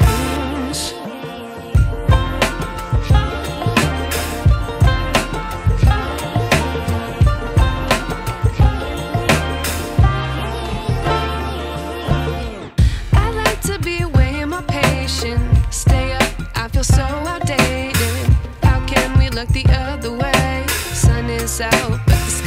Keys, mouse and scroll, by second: 3.7 alt+scroll down 1, 4.0-4.4 scroll up 1, 4.4 click, 8.5-8.8 alt+scroll down 2, 9.3 ctrl+t, 10.1 click, 13.9 click.